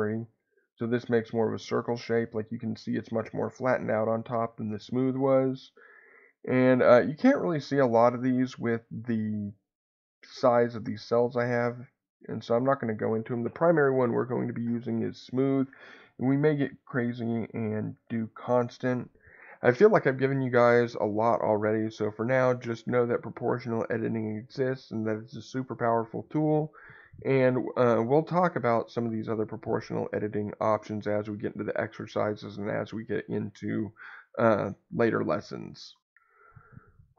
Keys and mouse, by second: 0.1 x, 4.4 Escape, 6.0 click, 7.2-21.6 drag.